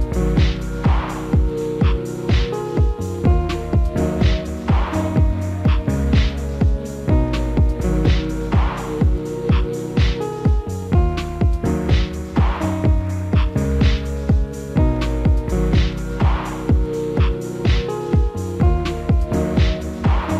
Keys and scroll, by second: 3.7 F3, 11.0 F4.